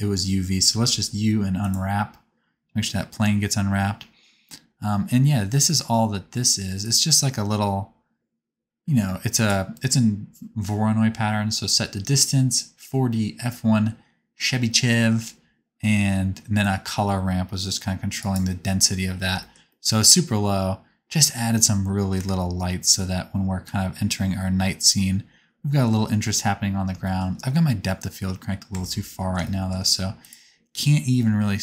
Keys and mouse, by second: 0.8 u, 2.8-5.3 drag, 5.3-8.6 right drag, 8.6 click, 16.6-17.9 drag, 18.3-20.4 middle drag, 22.1 KP_0, 23.8-26.7 drag, 28.7 Tab, 29.4 click, 30.2-31.6 middle drag.